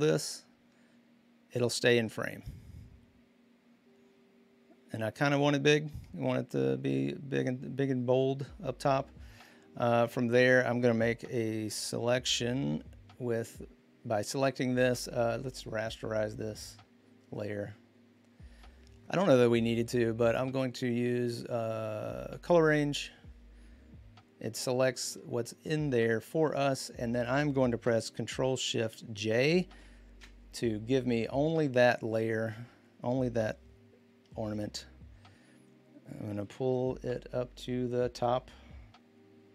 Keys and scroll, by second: 10.3 Return, 11.5 m, 29.6 ctrl+shift+j, 34.3 v, 36.4 ctrl+z.